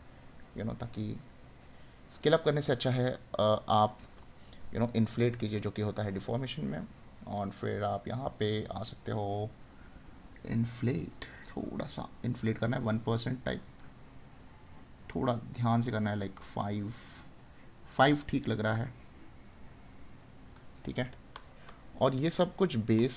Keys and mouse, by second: 1.9 right click, 20.9 right click.